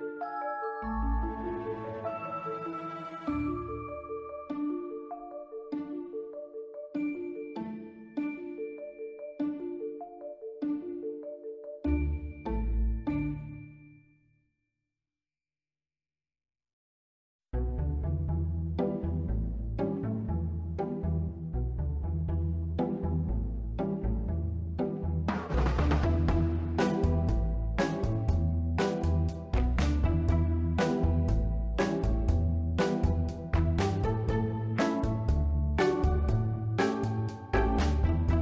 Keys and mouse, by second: 2.0-3.4 drag, 3.8 middle click, 4.2 middle click, 5.2-7.1 drag, 8.3 click, 8.7 ctrl+s, 8.9 ctrl+middle drag, 10.1 shift+right click, 10.5 shift+a, 12.7-13.2 middle drag, 14.4 y, 15.3 click, 15.9-16.4 drag, 16.8 r, 17.0 z, 18.0 click, 19.2 r, 19.5 y, 20.4 click, 20.7 middle drag, 21.6-22.7 drag, 23.0 middle drag, 23.4-23.8 ctrl+middle drag, 24.0 shift+middle drag, 24.5 middle drag, 25.0 shift+middle drag, 25.7 Tab, 26.2 ctrl+r, 29.9 click, 31.4 b, 32.0 b, 32.6 s, 33.0 y, 33.7 click, 34.8 b, 35.7 s, 36.2 y, 36.8 click, 37.5 click.